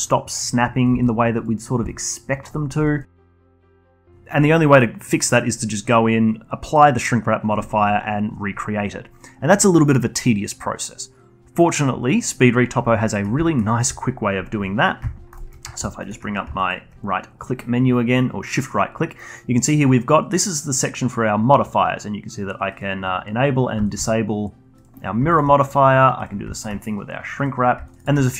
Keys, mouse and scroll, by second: 0.8 click, 0.9 g, 1.9-2.6 alt+drag, 2.6 scroll down 2, 2.8-3.4 alt+drag, 3.4-6.5 alt+middle drag, 13.1 middle click, 13.5 alt+middle click, 13.7-16.6 alt+drag, 16.6-19.6 shift+right drag, 23.8-27.8 shift+right drag, 27.8 middle click, 28.0-28.3 shift+right drag.